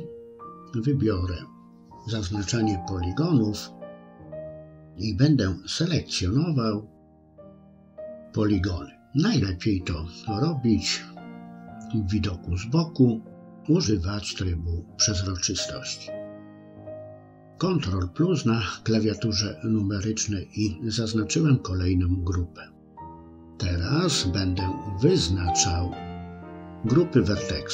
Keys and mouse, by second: 1.2 click, 3.6 click, 4.7 c, 16.0 ctrl+KP_Add, 16.7-19.4 middle drag, 19.8 KP_3, 21.8 click, 23.2 click, 24.9 click, 25.2-27.7 drag.